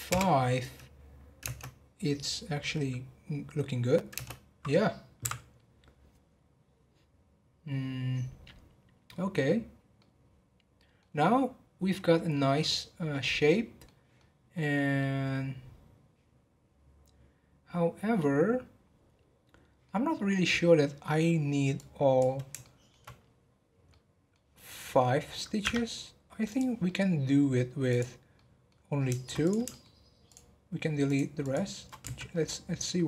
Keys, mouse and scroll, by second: 1.4 space, 4.1 space, 5.2 Right, 10.0-12.1 middle drag, 12.1 scroll up 1, 12.3-14.0 middle drag, 14.0 scroll down 1, 14.1-18.1 middle drag, 21.8 click, 22.6-25.6 shift+middle drag, 25.6 Tab, 26.4 click, 26.8 middle click, 27.4 scroll up 1, 27.8 click, 28.3-29.4 middle drag, 29.4 click, 29.6 shift+middle click, 30.2 shift+click, 31.0 shift+click, 31.4 shift+click, 32.0 x.